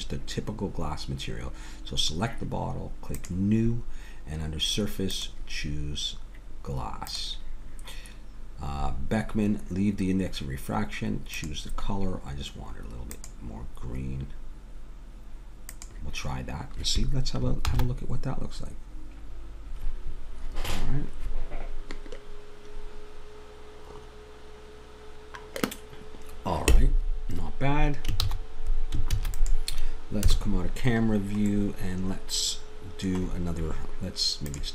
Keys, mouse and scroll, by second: 3.2-7.0 drag, 11.3-13.2 drag, 17.7 shift+z, 28.3 shift+z, 29.1 ctrl+s, 30.2 KP_0, 34.5-34.7 drag.